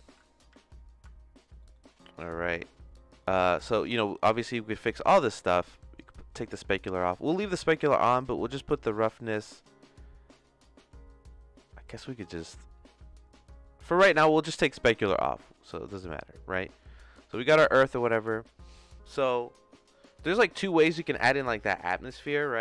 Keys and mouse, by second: 0.0 z, 0.5 z, 1.6 middle click, 3.1 middle click, 5.3 middle click, 6.0-7.4 drag, 7.7 middle click, 8.2-14.2 drag, 14.7 click, 15.1 click, 15.8 click.